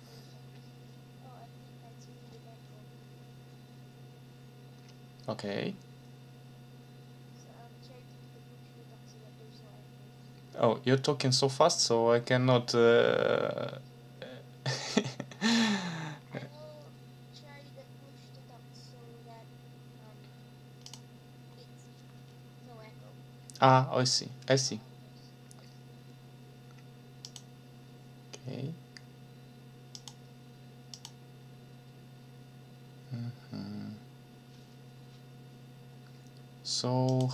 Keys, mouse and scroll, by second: 2.6 scroll up 2, 15.4-15.7 scroll up 2, 16.1 scroll up 2, 20.8 click, 21.5 scroll up 2, 27.2 click, 29.9 click, 30.9 click, 37.1 click.